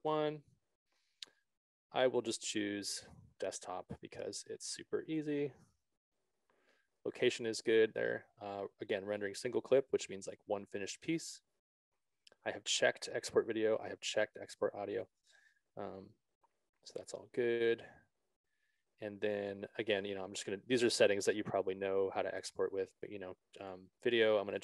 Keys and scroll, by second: 0.0-0.4 typing.